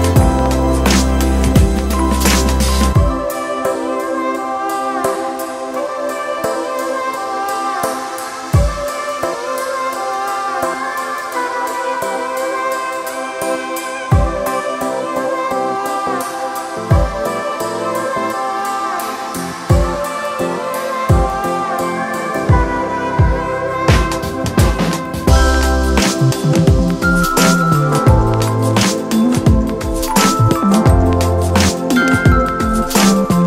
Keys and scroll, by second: 16.5 t, 21.8 space.